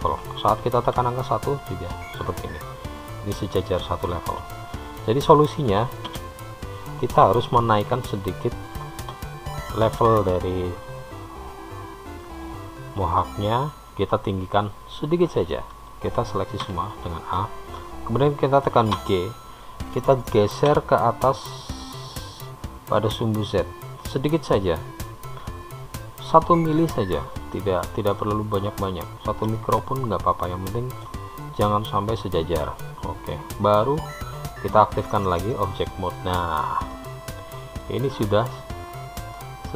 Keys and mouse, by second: 1.3 KP_1, 6.3 KP_3, 12.4 click, 16.8 a, 24.0 click, 28.5-31.3 middle drag, 33.9 click, 37.3 middle click, 39.6-39.7 middle drag.